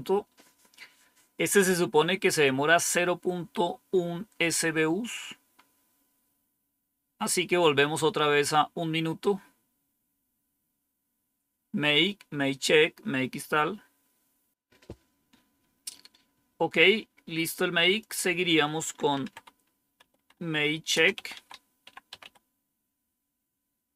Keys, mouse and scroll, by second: 5.0-6.2 scroll up 1, 8.5-10.0 scroll down 2, 17.7 click, 18.8-22.7 typing.